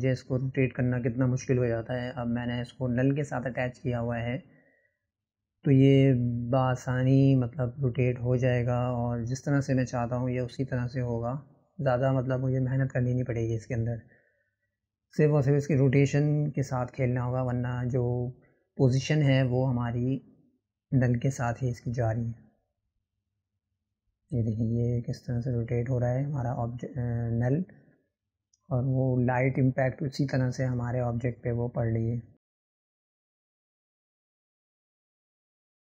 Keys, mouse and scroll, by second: 0.9-2.6 drag, 10.5-20.2 drag, 24.4 click, 32.6-34.2 drag.